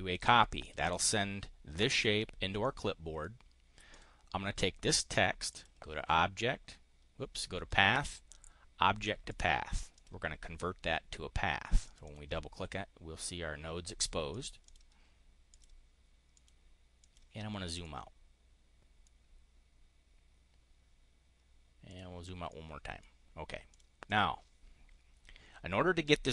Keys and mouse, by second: 0.1 click, 0.6 click, 2.6 click, 3.8 click, 5.4 click, 9.2 click, 9.9 click, 11.8 click, 14.2 click, 14.5 click, 15.4 click, 16.2 click, 16.9 click, 17.7-19.0 drag, 21.8 click, 22.4 click, 23.6 click, 23.9 click.